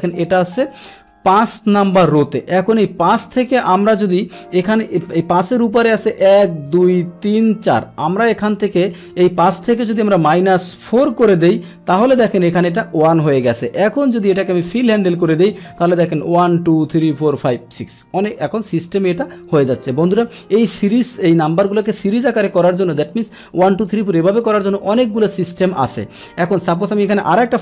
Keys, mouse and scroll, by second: 0.8 click, 3.4 click, 5.3 Return, 6.2 click, 6.7 click, 7.3 click, 7.8 click, 8.4 click, 9.2 click, 12.3 Return, 13.7 click, 14.3 click, 16.8 click, 26.5 Delete, 27.0 click.